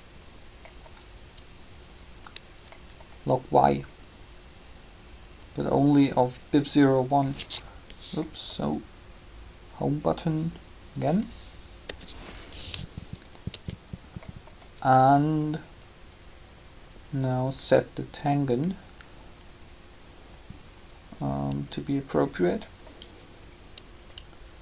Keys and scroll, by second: 11.8 Home, 13.5 Tab.